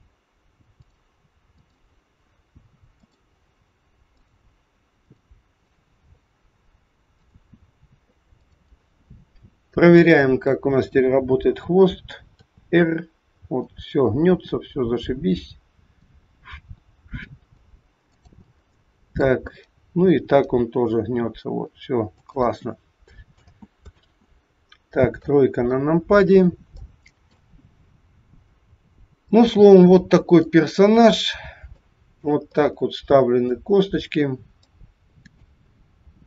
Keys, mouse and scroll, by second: 0.8 click, 3.0 click, 7.2 click, 9.9 click, 12.3 r, 18.5 middle click, 19.6-20.1 scroll down 3, 20.1 r, 23.5 ctrl+z, 24.0 ctrl+z, 25.1 KP_3, 26.3 scroll up 3, 26.8 shift+middle click, 27.7-28.2 scroll up 1, 28.5-28.8 scroll down 4, 29.3 middle click, 31.7 shift+middle click, 32.5 middle click, 35.7 scroll up 4.